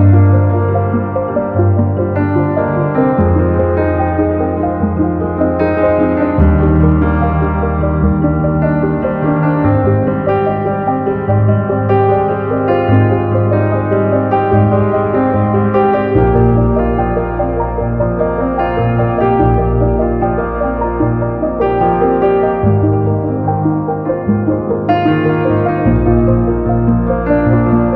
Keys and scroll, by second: 3.0-5.3 typing, 5.2 Return, 17.1 super+c, 17.4 super+v, 25.2 super+c, 25.3 super+v.